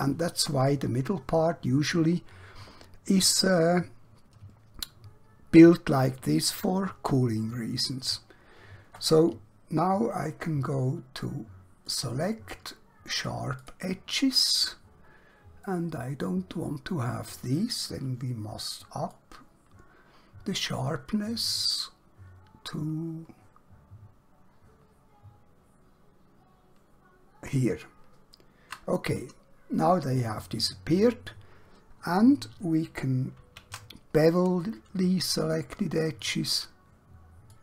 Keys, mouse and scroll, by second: 11.9 click, 14.7-15.1 scroll up 1, 15.1 scroll down 1, 15.7 middle click, 19.1 shift+click, 30.5 middle click, 33.3 ctrl+b, 37.5 shift+click.